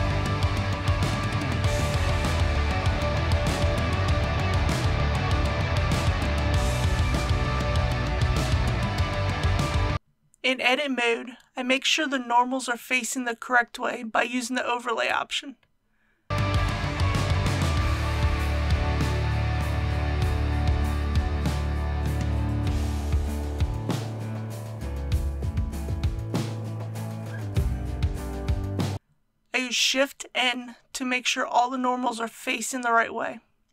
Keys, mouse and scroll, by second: 0.7 click, 1.4 scroll up 1, 1.5 middle click, 1.6 scroll down 1, 2.7 scroll up 1, 2.7-3.2 scroll down 1, 3.2 KP_1, 4.2 shift+scroll up 1, 4.3 shift+middle click, 5.6 right click, 9.2 click, 9.9 ctrl+z, 10.4 Tab, 14.2 click, 17.3-18.6 middle drag, 20.3-25.6 drag, 25.9-26.6 scroll down 1, 26.6 click, 28.9-29.4 scroll up 1, 29.9 shift+n.